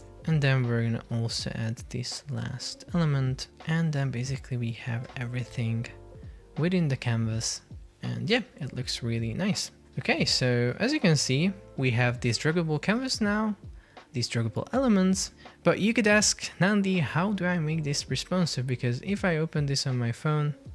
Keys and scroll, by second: 2.5 super+x, 3.8 super+v, 5.1 alt+v, 9.5 alt+v, 10.9 super+p, 15.4 Escape.